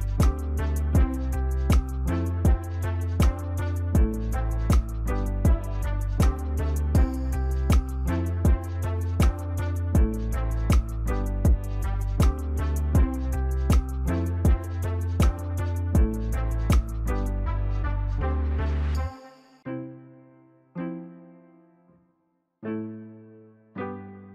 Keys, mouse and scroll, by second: 3.3 double click, 9.9 shift+click, 16.2 shift+click, 18.8 shift+click, 22.2 ctrl+click.